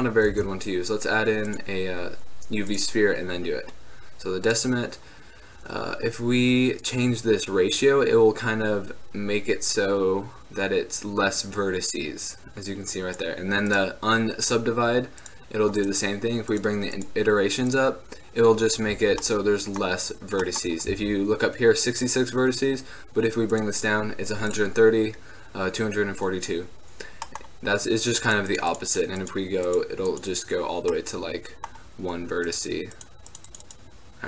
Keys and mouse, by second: 0.0 click, 0.5 shift+a, 7.3-23.7 drag, 19.1 z, 21.1 z, 27.5-31.6 middle drag.